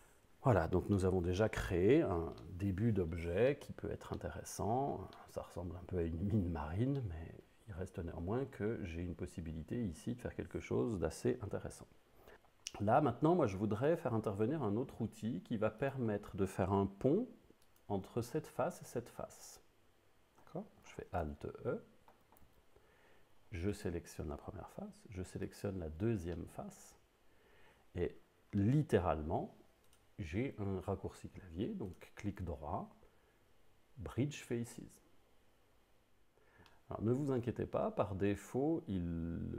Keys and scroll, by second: 22.5 alt+a, 23.5 a.